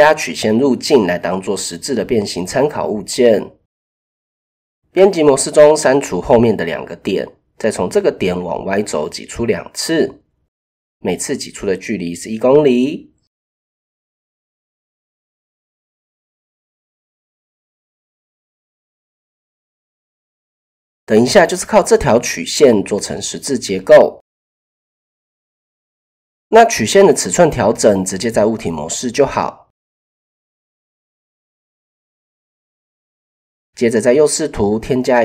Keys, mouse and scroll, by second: 1.3 middle click, 4.0 Tab, 4.6 shift+middle click, 5.2 middle click, 5.8 x, 8.5 e, 10.9 click, 12.3 click, 13.7 shift+middle click, 14.5 e, 17.3 click, 18.9 Tab, 20.8 click, 21.4 click, 24.4 click, 25.4-26.0 drag, 27.5 s, 29.8 click, 30.3 shift+click, 32.6 KP_3, 33.8-34.2 shift+drag, 34.5 shift+a.